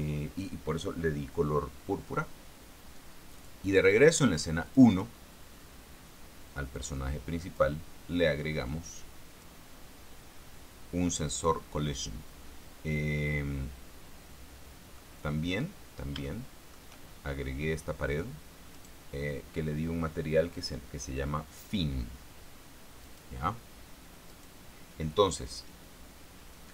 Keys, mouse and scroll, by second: 3.7 click, 4.2 click, 5.0 click, 7.1 click, 9.0 click, 15.3 middle click, 15.8-16.3 scroll down 1, 16.3 middle click, 16.6 shift+middle click, 19.1 right click, 23.4 right click, 24.6 right click.